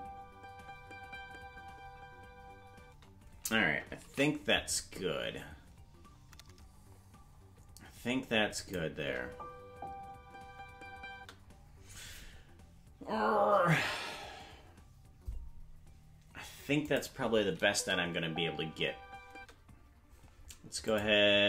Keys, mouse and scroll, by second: 2.9 space, 5.9 ctrl+s, 8.5 click, 8.9 space, 13.0 space, 16.8 click, 17.6 space, 20.8 click, 20.8 space.